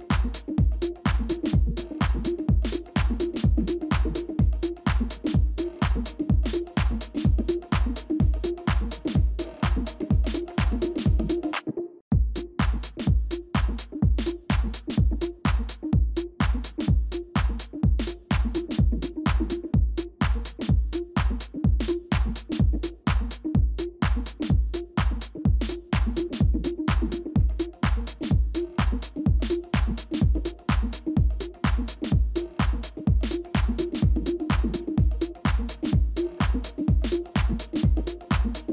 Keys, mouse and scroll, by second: 3.2 double click, 4.1 typing, 7.9 double click, 9.7 typing, 10.9 Return, 11.1 ctrl+z, 13.2 double click, 14.0 typing, 14.4 Return, 14.4 double click, 15.2-15.9 scroll down 1, 16.3 space, 17.5 alt+click, 21.4 ctrl+z, 21.9 shift+click, 22.5 shift+click, 35.9-36.6 typing.